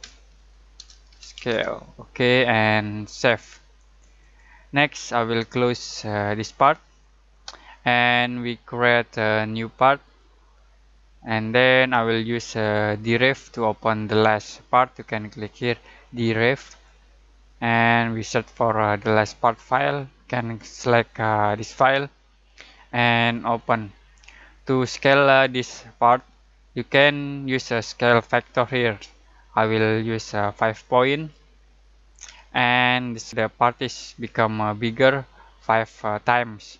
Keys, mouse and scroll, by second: 0.0-2.0 typing, 3.1 click, 5.2 typing, 8.6 typing, 10.0 click, 16.6 click, 19.0-21.5 drag, 19.0-19.8 typing, 30.8-32.2 drag, 31.1 typing, 32.2 5.